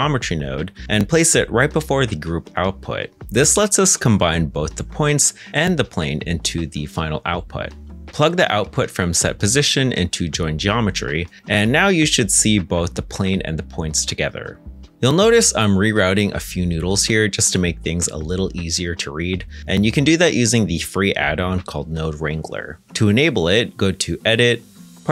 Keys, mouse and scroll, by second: 0.4 space, 0.7 Return, 13.7 shift+right click, 16.7 shift+click, 18.0 g.